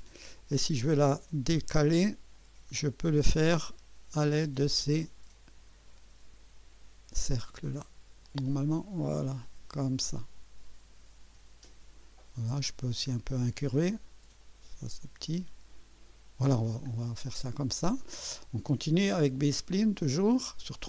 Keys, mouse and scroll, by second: 0.3 scroll up 1, 1.0 middle click, 2.4 middle click, 3.2 click, 4.5-6.5 drag, 7.3-12.2 drag, 12.8-13.7 drag, 14.4-16.7 drag, 17.0 scroll down 1, 17.5-18.2 right drag, 20.2 click.